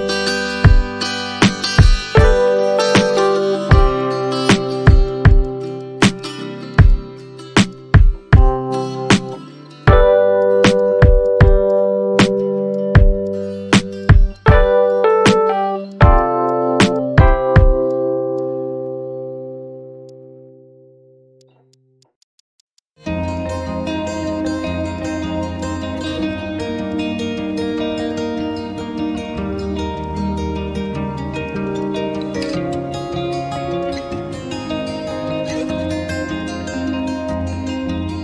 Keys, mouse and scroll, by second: 0.2 shift+click, 0.8 shift+click, 1.9 shift+click, 2.3 shift+click, 3.7 shift+click, 4.3 shift+click, 4.7 shift+click, 5.4 shift+click, 5.8 shift+click, 6.2 shift+click, 6.9 shift+click, 7.4 alt+middle click, 7.6 alt+scroll up 1, 7.7 alt+click, 7.9 alt+middle click, 8.8 shift+click, 9.3 alt+click, 9.4 alt+middle click, 9.7 alt+click, 9.7 middle click, 10.4 shift+click, 10.6 shift+click, 10.8 alt+click, 10.9 alt+middle click, 11.2 shift+click, 11.5 shift+click, 11.6 scroll down 1, 11.7 alt+click, 12.2 alt+click, 12.5 alt+scroll up 1, 12.6 scroll down 1, 12.7 alt+click, 13.2 alt+click, 13.4 alt+middle click, 13.5 alt+scroll up 2, 13.7 scroll down 1, 14.0-14.3 scroll, 14.3 Tab, 14.8 Tab, 16.0 alt+scroll up 1, 17.6 alt+middle click, 18.2 scroll down 1, 18.4 alt+click, 18.9-19.4 scroll up 1, 21.4 shift+click, 22.0 shift+click, 22.2 shift+click, 22.6 shift+click, 22.7 shift+click, 22.9 alt+middle click, 23.2 shift+click, 24.1 shift+click, 24.5 shift+click, 24.7 ctrl+z, 24.8 scroll down 1, 24.9 alt+click, 26.0 scroll down 1, 26.4 scroll up 1, 26.6 alt+click, 26.8 alt+middle click, 27.6 3, 28.1 alt+click, 29.4-29.8 scroll down 1, 29.8 alt+middle click, 30.6 3, 31.0 scroll up 1, 31.9 scroll down 1, 32.2 alt+middle click, 32.3 alt+click, 33.0 alt+middle click, 34.1 scroll up 1, 35.1 scroll up 1, 35.3 alt+click, 35.9 alt+middle click, 36.3 alt+click, 36.6 alt+scroll up 1, 36.9-37.2 scroll down 1, 37.3 right click.